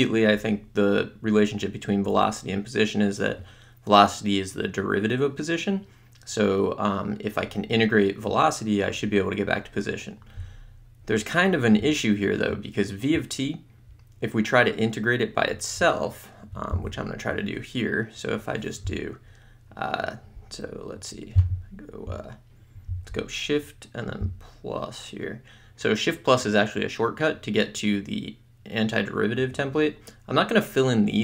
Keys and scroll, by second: 17.2 m.